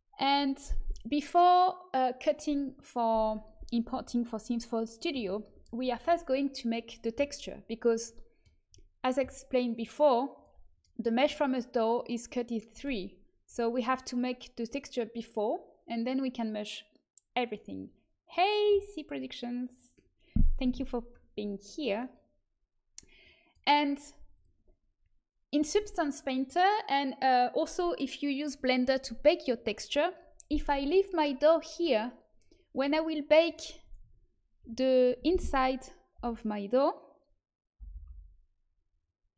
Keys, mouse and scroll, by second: 7.9-13.3 middle drag, 9.6-12.7 drag, 23.1-32.7 drag, 33.4 right click, 33.9 Tab, 34.5 a, 36.1-39.3 l.